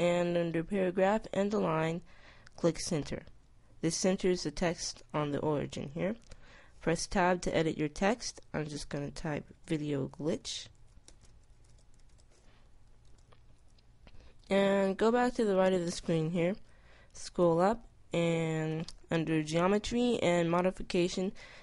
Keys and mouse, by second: 0.0 click, 2.0-3.7 drag, 6.6 Tab, 7.6 BackSpace, 8.2 BackSpace, 9.6-11.6 typing, 12.6 Tab, 18.0 middle click, 20.6-21.6 middle drag.